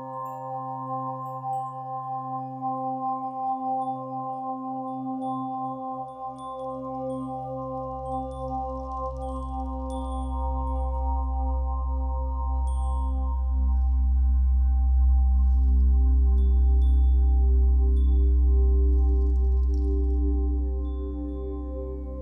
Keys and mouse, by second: 0.1 alt+shift+click, 0.9 shift+click, 1.8 shift+click, 2.4 click, 2.8 click, 3.2 alt+shift+click, 3.5 alt+shift+click, 5.1 shift+click, 7.3 click, 9.9 click, 10.5-12.4 drag, 13.6 ctrl+alt+click, 14.3-14.6 alt+shift+drag, 14.8 ctrl+alt+drag, 15.4 alt+shift+drag, 15.9 ctrl+alt+click, 18.1-19.6 drag, 19.6 Left, 20.8 i, 21.5-22.2 drag.